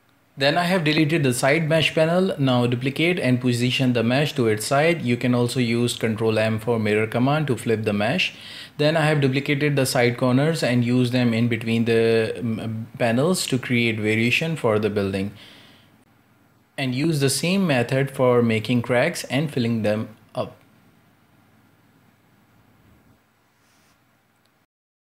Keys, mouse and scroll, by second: 0.0 right click, 0.4 x, 0.7 right click, 0.9 alt+d, 2.3 ctrl+m, 3.0 g, 4.8 right click, 4.9 alt+d, 6.3 alt+d, 7.2 ctrl+m, 7.8 g, 9.2 shift+right click, 9.5 g, 11.6 shift+middle click, 12.3 g, 13.0 scroll up 1, 13.1 shift+middle click, 13.3 right click, 13.7 Tab, 14.0-14.5 scroll up 2, 14.5 shift+middle drag, 14.8 z, 14.9 a, 15.0 a, 15.2 k, 21.6 x, 22.1 shift+middle click, 22.8-23.3 scroll up 2, 23.0 z, 23.3 z.